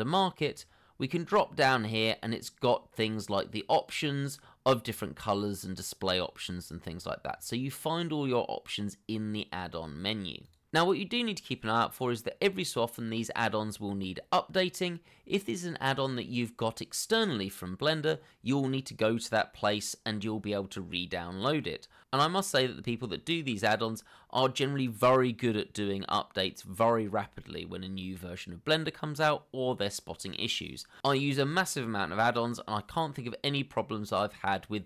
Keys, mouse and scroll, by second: 1.3 scroll down 1, 1.9 scroll down 1, 5.9 double click, 6.9 scroll up 1.